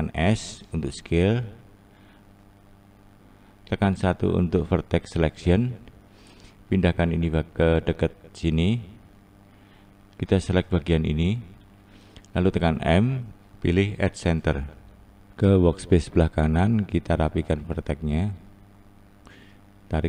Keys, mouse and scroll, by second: 3.9 1, 5.3 click, 6.0 click, 7.5 click, 8.7-10.3 scroll up 1, 10.3 click, 11.5 click, 13.5 m, 14.1-14.9 scroll down 2, 14.9-16.4 scroll up 2, 16.4-16.9 scroll up 1, 16.9 click, 19.5 click, 19.9 click.